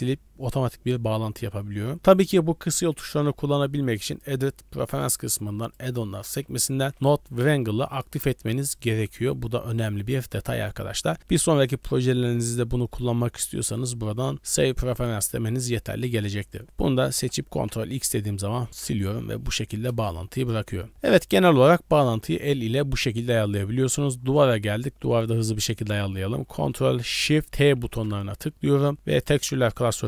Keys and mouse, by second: 4.2 click, 16.7 click, 17.6 ctrl+x, 19.2 drag, 19.9 KP_0, 23.4 click, 25.4 click, 27.8 ctrl+shift+t.